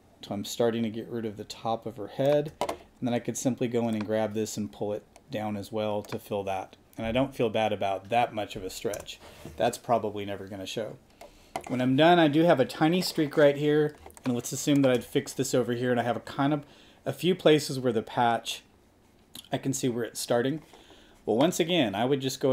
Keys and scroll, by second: 9.0 Return, 14.0 space.